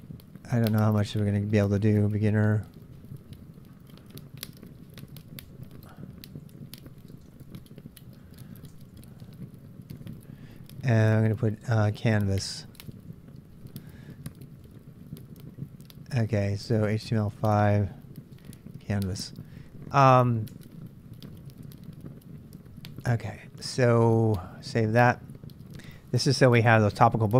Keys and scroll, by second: 2.4-18.4 typing, 20.5 Return, 20.5 typing, 23.1 ctrl+[, 23.1 ctrl+j, 23.2-25.0 typing.